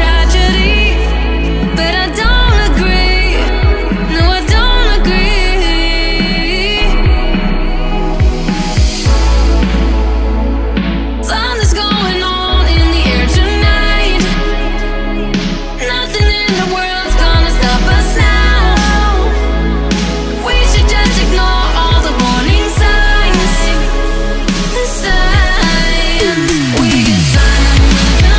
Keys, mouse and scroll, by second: 5.3 middle click, 6.0-9.5 drag, 9.5-13.4 middle drag, 14.7-16.6 drag, 17.4 Tab, 18.0 middle click, 18.8-20.5 drag, 20.5 f, 20.7-21.8 middle drag, 21.8 alt+click, 22.3 f, 22.7 Tab, 23.3-26.2 middle drag, 26.2-27.7 drag, 28.2 click.